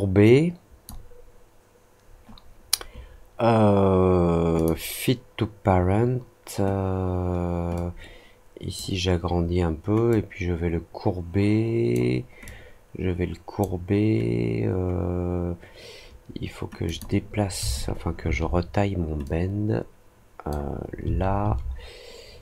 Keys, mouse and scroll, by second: 4.5 click, 7.7-8.7 drag, 10.0-11.9 drag, 12.4-13.5 drag, 16.8 click, 19.2-20.4 drag.